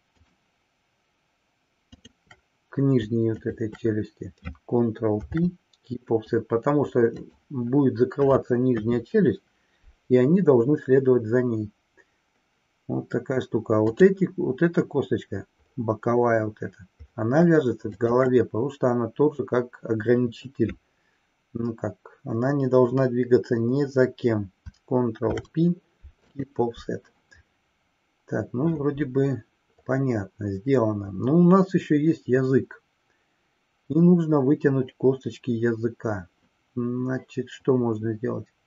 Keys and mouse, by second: 0.3-1.1 shift+drag, 2.0-2.6 shift+drag, 3.5 shift+click, 5.1 ctrl+p, 8.7 KP_3, 13.7 click, 18.0 shift+click, 25.2 ctrl+p.